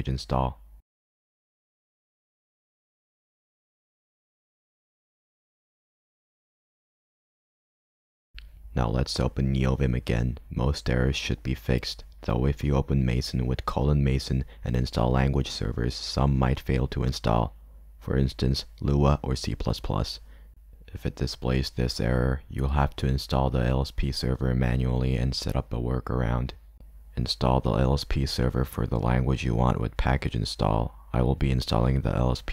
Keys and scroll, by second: 11.8 m.